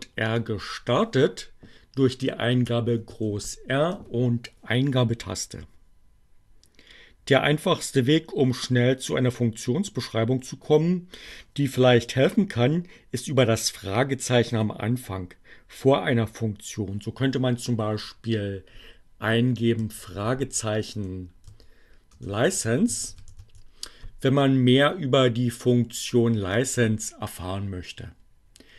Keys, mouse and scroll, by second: 1.6 shift+r, 19.6 l, 21.1-23.6 typing, 24.7 Return.